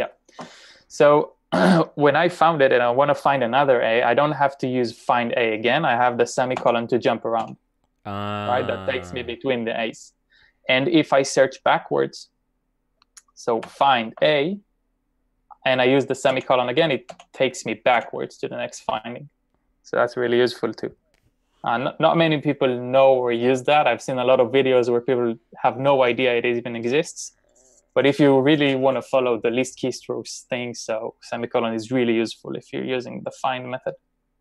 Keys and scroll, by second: 6.7 ;, 7.4 ;, 13.7 shift+f, 14.2 a, 16.4 ;, 17.3 ;.